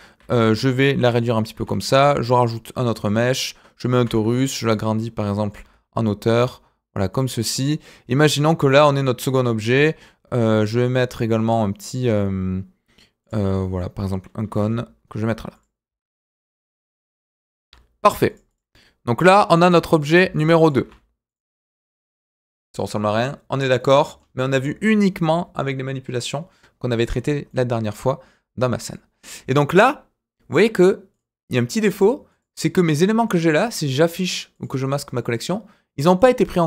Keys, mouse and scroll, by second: 0.2 s, 1.5 shift+a, 3.3-3.8 middle drag, 3.9 s, 5.0-5.5 middle drag, 5.5 g, 7.3 click, 7.5-9.2 middle drag, 9.6 shift+a, 13.5 middle drag, 14.5 g, 18.5 click, 18.7-19.2 middle drag, 19.4 click, 19.6 g, 21.4 click, 21.7-22.3 middle drag, 23.6 scroll down 1, 23.8-24.2 middle drag, 27.0-27.5 scroll up 2, 27.5-28.9 middle drag, 31.1 click, 31.7 click, 32.3 click, 32.8 click, 33.2 click, 33.6 click, 34.5 click, 35.0 click, 36.1 click.